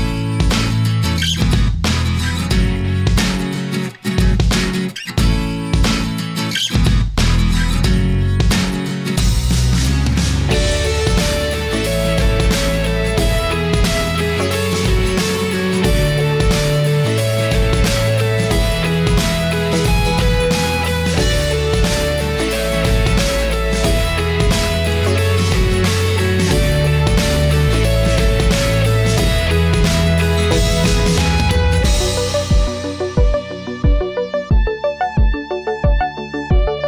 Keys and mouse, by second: 1.0 middle click, 1.8 shift+a, 5.8 click, 7.0 click, 8.4-9.4 middle drag, 12.5 ctrl+right click, 14.2-15.6 drag, 16.2 middle click, 18.2-19.5 drag, 20.4-21.5 drag, 22.5 middle click, 25.1 middle click, 26.7-28.8 drag, 30.4-32.1 drag, 33.5-34.6 middle drag.